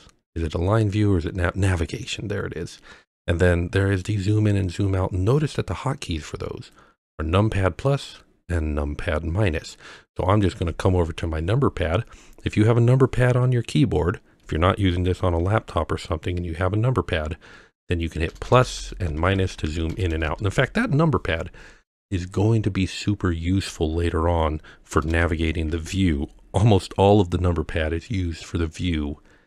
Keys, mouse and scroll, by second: 18.3 KP_Add, 18.5 KP_Add, 18.6 KP_Add, 18.8 KP_Add, 19.0 KP_Subtract, 19.2 KP_Subtract, 19.4 KP_Subtract, 19.5 KP_Subtract, 19.7 KP_Subtract, 19.9 KP_Add, 20.1 KP_Add, 20.3 KP_Add, 20.5 KP_Subtract, 24.9 KP_Add, 25.1 KP_Add, 25.7 KP_Subtract, 25.9 KP_Subtract.